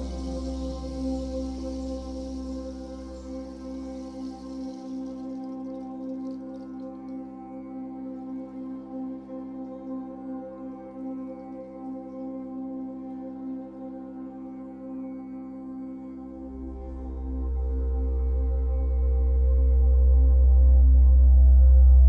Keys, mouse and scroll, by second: 0.8-2.1 middle drag, 2.1-4.4 drag, 4.4-5.9 middle drag, 5.9-7.0 drag, 7.0-8.1 shift+middle drag, 8.1-9.7 drag, 9.7-11.2 middle drag, 11.2-13.8 drag, 13.8-15.4 shift+middle drag, 15.4-17.8 drag, 17.7-18.3 scroll down 2, 17.8-20.6 middle drag, 18.7-20.2 scroll up 1, 20.6-22.0 drag.